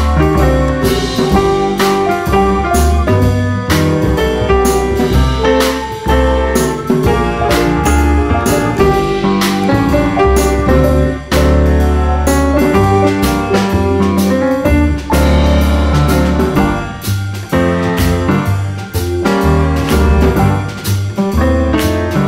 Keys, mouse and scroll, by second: 0.3-0.6 scroll up 1, 1.0-2.8 drag, 3.3-4.5 right drag, 4.7 click, 5.3 click, 6.0 click, 7.2 s, 8.3 click, 9.3 click, 9.9 click, 10.1-10.4 scroll down 2, 10.4-10.8 scroll up 1, 10.8-13.3 drag, 13.5-13.9 scroll down 2, 13.9-14.3 scroll up 1, 14.5 click, 14.9 scroll down 1, 15.1-15.6 scroll up 2, 15.9 click, 17.8 click, 20.9 click, 21.7 click, 22.2 click.